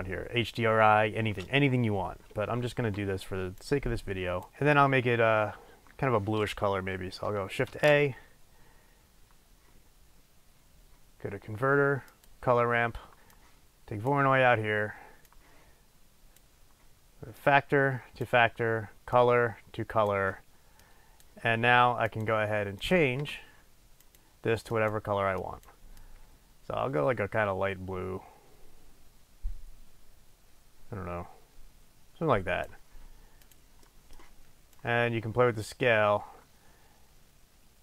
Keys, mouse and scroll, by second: 3.6 click, 4.5-9.8 middle drag, 8.2 shift+a, 9.8-11.9 drag, 11.9-13.1 middle drag, 13.4 click, 15.5 click, 17.5 click, 22.2 click, 23.0 click, 24.1 click, 33.8 click, 34.0 middle click, 34.9-37.8 drag.